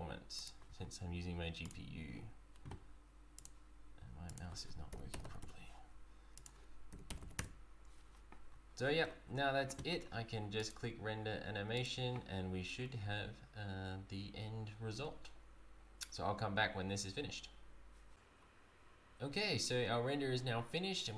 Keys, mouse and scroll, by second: 0.4 click, 0.4-1.1 scroll down 3, 1.6 click, 3.4 click, 5.2 click, 5.2 KP_0, 6.4 click, 7.2 KP_0, 8.5-8.8 scroll up 4, 8.8-9.3 scroll down 8, 10.6 click.